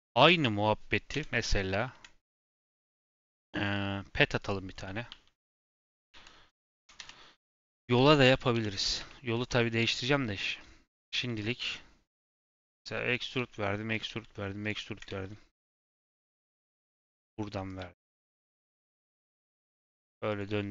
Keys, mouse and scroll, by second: 1.1 KP_7, 1.8-2.3 shift+middle drag, 2.3 shift+a, 4.7 scroll down 1, 9.5 scroll up 4, 9.7 Tab, 11.1 s, 12.1 click, 12.4 shift+middle click, 12.7 e, 13.3 e, 14.0 e, 14.8 shift+middle click, 15.0 e, 15.9 shift+middle click, 16.1 scroll down 1, 16.4 e, 17.2 e, 17.7 e, 18.9 shift+middle click, 19.2 e, 19.8 e.